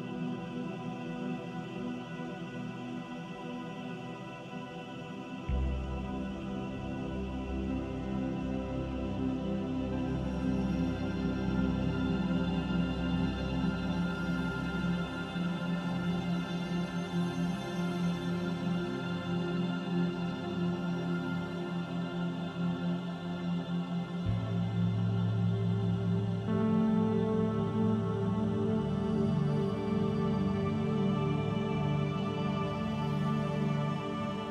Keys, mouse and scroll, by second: 4.1 middle click, 5.2 alt+click, 5.7 middle click, 6.4 click, 8.7 middle click, 10.4 alt+click, 11.8 middle click, 14.3 click, 16.3 e, 21.0 e, 21.6 click, 23.8 Tab, 24.3 middle click, 25.7 ctrl+a, 27.7 middle click, 29.7-30.4 scroll down 1, 30.5 middle click, 31.3 scroll up 1, 33.1 scroll down 1, 33.8-34.5 scroll down 10.